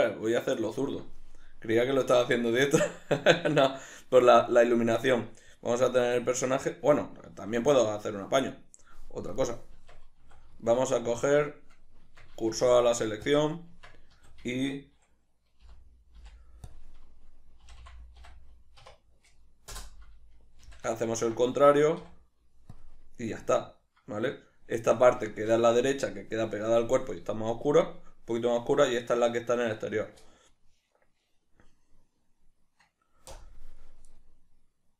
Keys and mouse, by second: 7.6 z, 8.9 right click, 9.7 click, 10.2 Tab, 10.6 a, 11.0-12.6 shift+middle drag, 12.4 Tab, 12.8 shift+s, 14.1 Tab, 14.5 a, 16.0 -, 16.6 ., 18.1 s, 20.1 Return, 21.0 shift+n, 21.6 Tab, 22.4 z, 22.7-25.2 middle drag, 25.7-34.9 shift+middle drag.